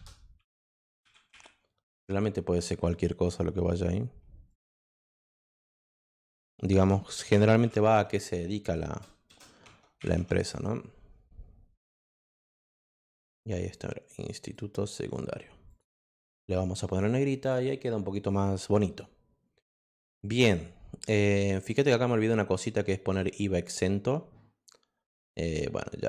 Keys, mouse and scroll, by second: 0.0-1.1 typing, 4.5 click, 5.6 click, 7.2 BackSpace, 8.9 BackSpace, 9.3 BackSpace, 12.0-14.5 drag, 15.6 click, 15.9 click, 16.1 click, 16.9 click, 17.4 click, 21.7 click.